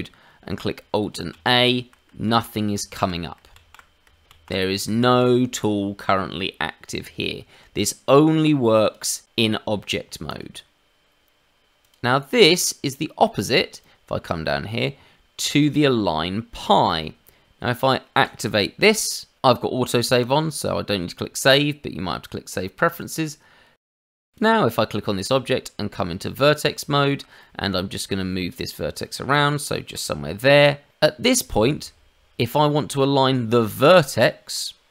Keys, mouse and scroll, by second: 1.3 alt+a, 2.2 alt+a, 2.9 alt+a, 3.5 alt+a, 4.3 alt+a, 5.0 alt+a, 6.9 Tab, 8.0-8.8 scroll down 2, 8.8 click, 9.2 click, 10.2 click, 11.8 click, 23.4-23.8 scroll up 2, 23.8 middle click, 24.3 Tab, 24.3 click, 25.3 Tab, 26.3 middle click, 26.9 shift+middle click, 27.3 middle click, 28.0 click, 28.2 middle click, 29.3 g, 30.2 middle click, 30.9 middle click, 31.5 shift+middle click, 33.6 middle click.